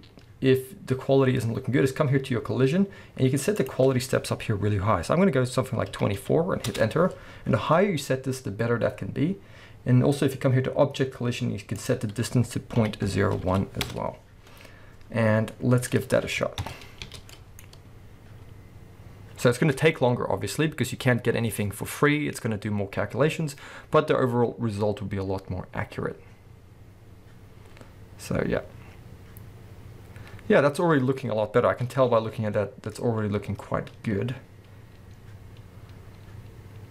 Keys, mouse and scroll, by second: 3.6-17.9 drag, 6.8 Return, 13.9 Return, 16.0-16.6 scroll down 2, 16.6 shift+Left, 17.0 space, 17.9-36.9 middle drag.